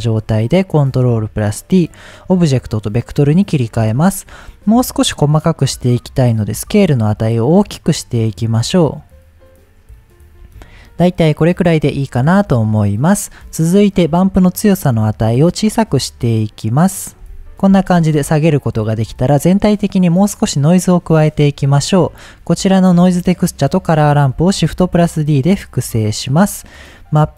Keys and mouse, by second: 0.4 middle click, 1.4-2.0 drag, 2.8 middle click, 5.8-10.3 drag, 12.0-12.9 middle drag, 14.6-17.5 drag, 21.9 middle click, 23.0-23.5 drag, 24.6 shift+d, 26.3 click.